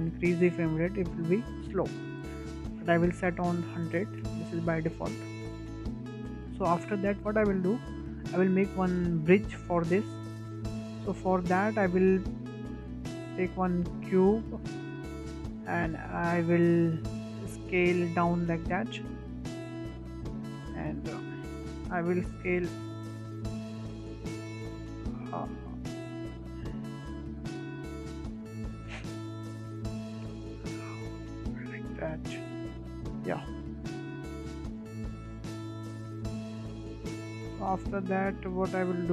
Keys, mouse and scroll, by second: 0.3 space, 0.8-4.5 drag, 4.5 KP_0, 5.7-6.1 scroll down 4, 6.1-6.4 shift+middle drag, 6.4-6.8 scroll up 3, 6.8 shift+middle click, 7.2 scroll down 1, 7.4-7.8 scroll up 4, 7.8-8.3 shift+middle drag, 8.3 scroll up 1, 8.6-9.5 shift+middle drag, 9.5-9.8 scroll up 2, 9.8-10.1 shift+middle drag, 10.1 scroll down 2, 10.4 shift+a, 13.5-14.0 scroll down 6, 14.0-14.3 shift+middle drag, 14.3-14.7 scroll up 1, 14.7 shift+middle click, 15.1-15.4 scroll up 5, 15.4-17.7 shift+middle drag, 17.7 click, 20.7-21.0 shift+middle drag, 21.0 scroll down 2, 21.5 `, 22.4 shift+middle click, 23.2 click, 24.8 click, 27.2 click, 29.8 ctrl+z, 29.8 click, 30.6 click, 31.1 click, 32.9 click, 33.7 scroll down 4, 34.0-34.5 middle drag, 34.5 scroll up 3, 34.7-35.2 shift+middle drag, 35.2-35.7 scroll up 2, 35.9 click, 37.4 shift+middle click, 38.0 Tab, 38.5-39.1 shift+middle drag.